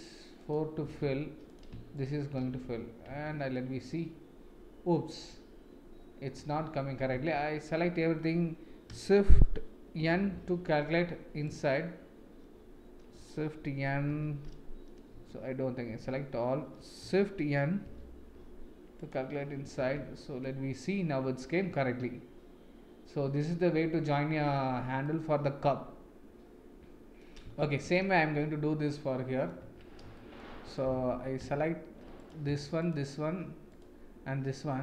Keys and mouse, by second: 0.4 shift+click, 0.8 f, 1.9 shift+click, 2.4 f, 3.2 Tab, 3.5-6.2 middle drag, 6.3 Tab, 7.1 a, 10.1 shift+n, 11.4 click, 14.0 shift+n, 15.8 a, 17.8 shift+n, 19.0 click, 19.9 Tab, 20.4-24.5 middle drag, 25.0-27.2 middle drag, 27.5 shift+middle click, 28.8 middle click, 29.6 Tab, 30.1 shift+middle click, 30.6 click, 32.8 shift+click.